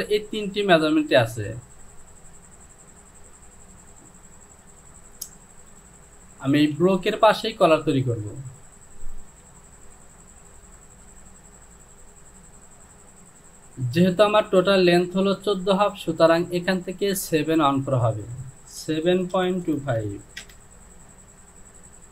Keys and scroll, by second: 6.7 Home, 9.4 Delete, 19.4 KP_Decimal, 19.7 KP_2, 19.9 KP_5, 20.4 Return.